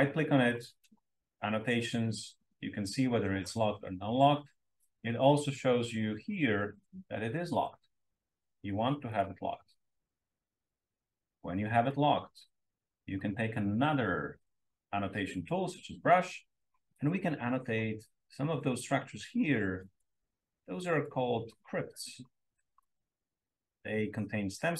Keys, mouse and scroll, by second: 9.0 click, 10.5-11.2 drag, 16.0-16.4 scroll up 2, 17.0-20.2 drag, 21.0-22.9 drag, 23.4-24.7 drag.